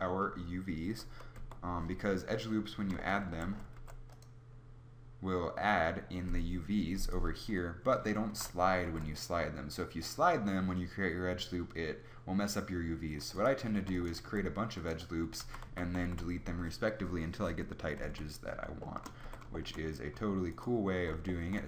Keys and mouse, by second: 1.3 Tab, 3.3 a, 4.1 ctrl+r, 8.3 ctrl+z, 9.1 ctrl+r, 13.9 ctrl+r, 14.7 ctrl+r, 15.4 ctrl+z, 15.6 ctrl+z, 15.9 ctrl+z, 18.1 Tab, 19.2 Tab.